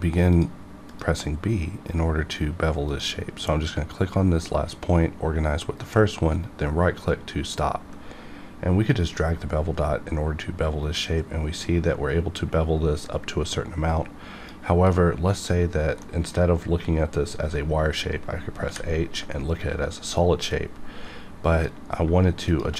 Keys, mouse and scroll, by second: 6.3 right click, 8.4 right click, 9.1-14.9 drag, 14.9 middle click, 16.0 middle click, 18.6 h, 20.5-22.7 drag.